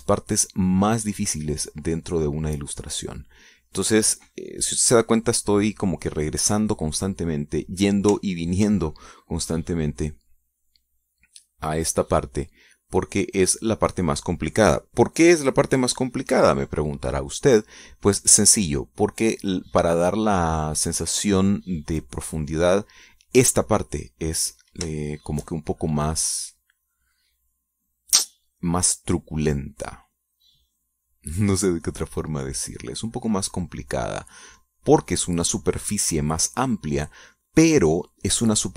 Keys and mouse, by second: 5.3 middle click, 9.6 ctrl+click, 10.0 ctrl+middle click, 10.7-15.6 drag, 18.8-22.6 drag, 22.9 middle click, 23.7 middle click, 25.2 middle click, 26.3-36.5 shift+drag.